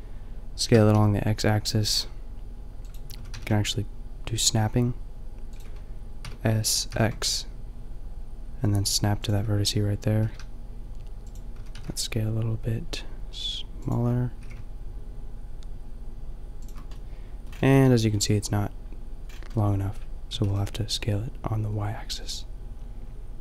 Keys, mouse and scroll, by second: 0.7 s, 2.9-3.2 drag, 3.2 s, 6.3 s, 9.3-9.8 drag, 10.2 g, 11.2 drag, 11.6 s, 14.4 g, 17.0 drag, 17.2-20.3 middle drag, 20.3 s, 20.7 middle click.